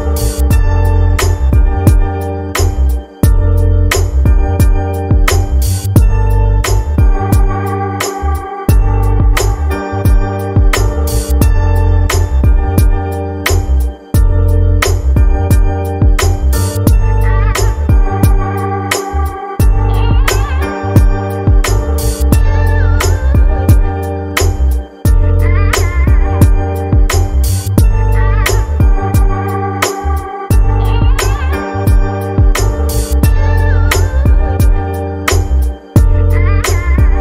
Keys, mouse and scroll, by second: 3.7-6.0 drag, 14.7-15.3 middle drag, 15.3 scroll up 3, 15.7-16.1 shift+middle drag, 16.1-17.1 scroll up 6, 16.5-16.8 shift+middle drag, 17.2-19.5 shift+middle drag, 19.9-23.2 drag, 26.3 click, 30.2-31.4 middle drag, 31.4-31.9 scroll down 2, 31.9-32.5 scroll down 5, 33.0-34.5 middle drag, 34.5-36.0 scroll down 4, 36.0-37.2 middle drag.